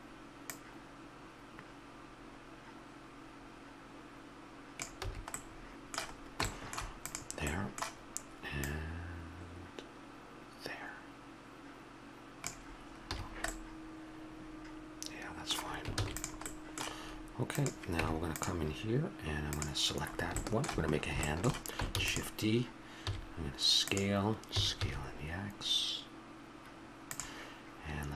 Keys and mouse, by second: 0.5-2.2 drag, 5.0 a, 5.7-7.0 middle drag, 7.0 right click, 7.6-10.4 middle drag, 13.1 a, 13.2-15.9 middle drag, 15.9 ctrl+s, 17.5 click, 18.0 Tab, 20.1-22.0 middle drag, 22.0 shift+d, 23.0 s, 24.6 s.